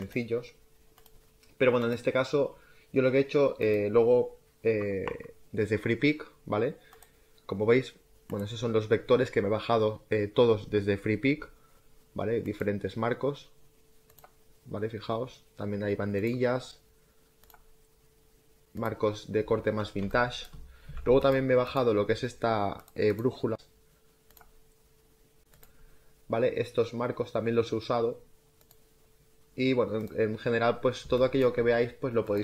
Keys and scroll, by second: 20.0 space, 20.7 z, 30.9 space.